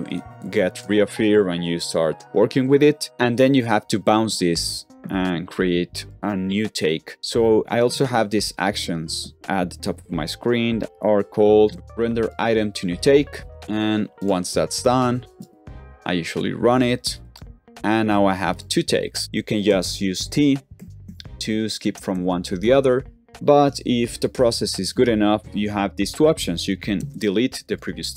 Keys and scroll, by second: 7.8 shift+', 9.3 shift+', 11.2-12.1 typing, 19.6-22.5 typing, 25.3 t, 26.9 shift+BackSpace, 27.6 super+z.